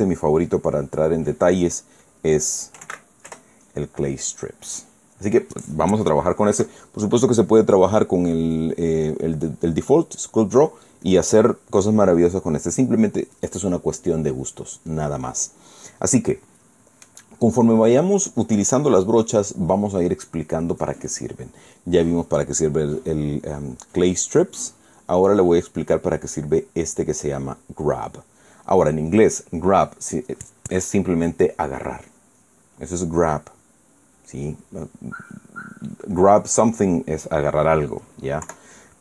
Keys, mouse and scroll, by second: 2.7 click, 3.2-4.1 typing, 7.3 KP_Subtract, 8.6 click, 11.7 click, 25.7 click, 27.8 click.